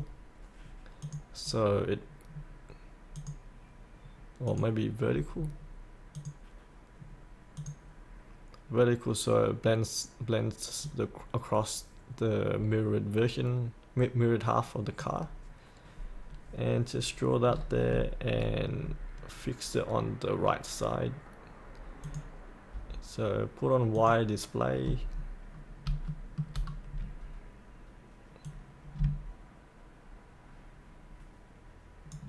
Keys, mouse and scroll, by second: 2.3-3.1 scroll down 1, 3.1 click, 5.3-6.1 scroll down 1, 6.1 click, 9.0-15.1 drag, 17.4-17.9 scroll down 1, 22.0 click, 25.5-25.8 scroll down 1, 26.1 shift+middle click, 26.6 scroll down 1, 28.4-30.3 drag, 30.4-32.2 ctrl+drag.